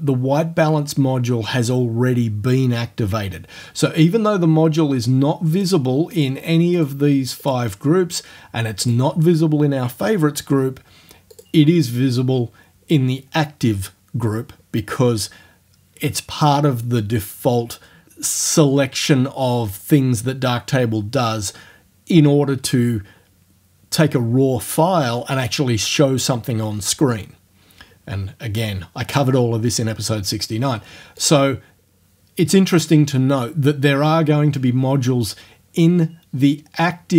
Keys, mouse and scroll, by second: 5.6 click, 6.2 click, 6.8 click, 7.4 click, 8.9 click, 11.4 click, 31.2 click.